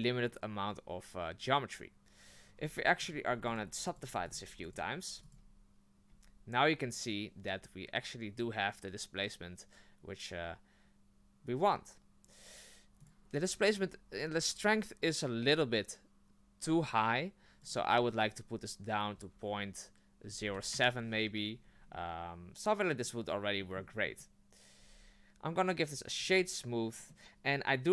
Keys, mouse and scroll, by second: 2.5-5.1 typing, 6.1 Tab, 13.0 click, 17.6-20.7 drag, 21.9-24.0 middle drag, 24.0-24.8 scroll up 1, 24.8 w, 27.1-27.9 middle drag.